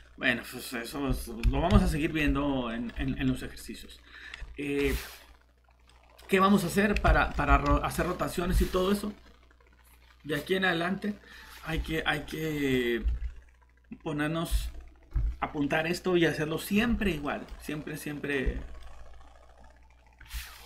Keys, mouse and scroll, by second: 1.7 7, 4.2 scroll down 1, 4.6 middle click, 4.8 scroll up 1, 5.9 middle click, 7.7 ctrl+shift+z, 13.1 alt+Tab.